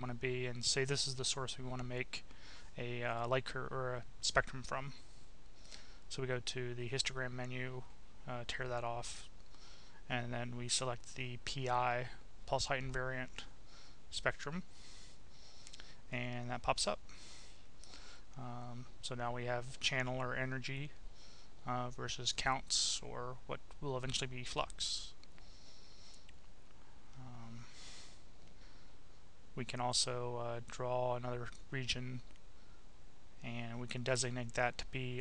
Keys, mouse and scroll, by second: 2.4 click, 4.7 click, 6.4 click, 7.6 click, 8.8-11.3 drag, 13.3 click, 17.3-19.7 drag, 26.7-28.3 drag, 28.8 click, 30.1-32.4 drag, 35.1 click.